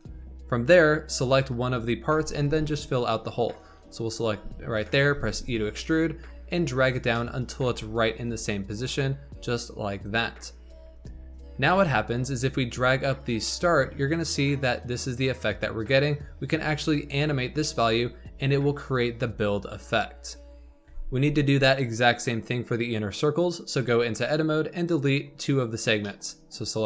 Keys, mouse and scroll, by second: 1.5 KP_7, 2.3 g, 3.5 click, 3.8-4.2 scroll up 3, 4.2 g, 5.1 e, 7.1 shift+middle click, 7.4-7.7 scroll up 4, 7.7 g, 10.6 Tab, 10.9-11.6 scroll down 8, 11.6 Tab, 12.9-16.0 drag, 17.3-17.6 scroll down 5, 17.6-18.9 shift+middle drag, 18.9-20.5 drag, 20.5 Tab, 20.8 Tab, 23.7 Tab, 24.7 click, 25.4 shift+click, 25.9 shift+middle click, 26.3-26.8 scroll up 2.